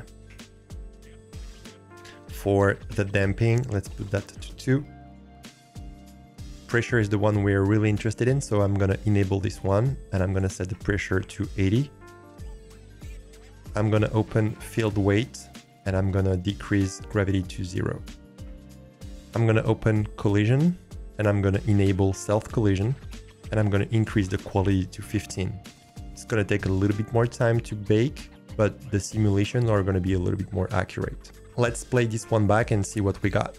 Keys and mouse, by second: 4.1-5.1 drag, 9.6-12.1 drag, 14.6 click, 16.8 click, 20.1 click, 22.4-25.8 drag.